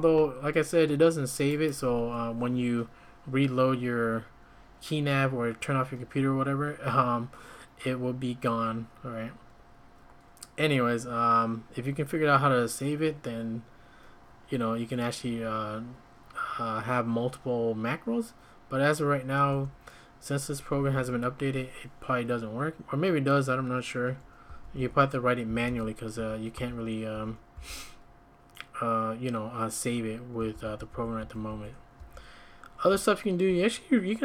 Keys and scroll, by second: 19.6 `, 20.7 Escape, 21.0 Escape, 24.5-27.5 typing, 30.4-33.6 typing.